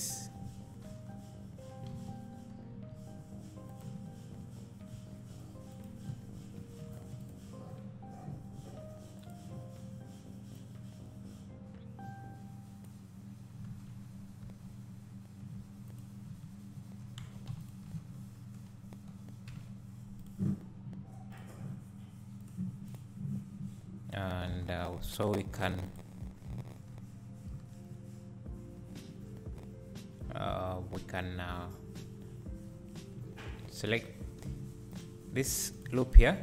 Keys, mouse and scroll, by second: 1.1 j, 1.9 alt+a, 2.9 3, 3.7 click, 5.1 2, 5.7 click, 7.1 1, 7.3 click, 9.2-16.0 drag, 13.8 alt+a, 14.7 3, 15.8 1, 17.3 w, 17.7 shift+click, 19.5 alt+m, 25.9 click, 26.9 3, 30.5 1, 33.9 2, 34.3 3, 34.7 1, 34.9 click, 35.7 ctrl+click.